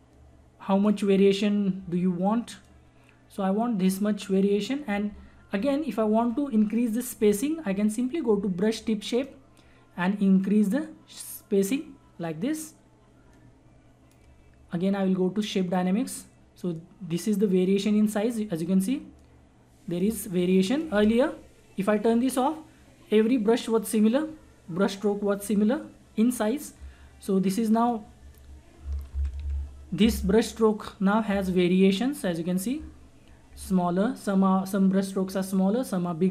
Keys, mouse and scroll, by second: 9.1-23.4 drag, 27.8 click, 29.1 ctrl+z, 31.6-34.6 drag.